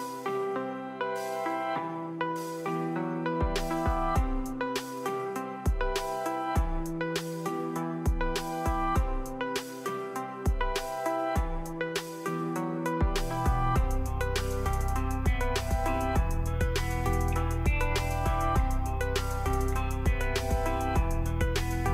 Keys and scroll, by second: 2.2-3.9 typing, 15.6-19.8 typing.